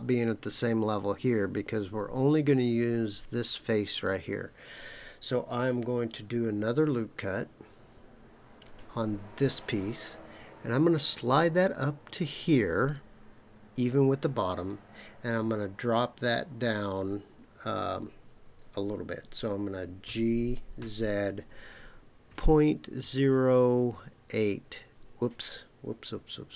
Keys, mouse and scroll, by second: 7.7 ctrl+r, 12.3 click, 20.0 g, 20.8 z, 22.3 KP_Decimal, 23.0 KP_0, 24.1 KP_8.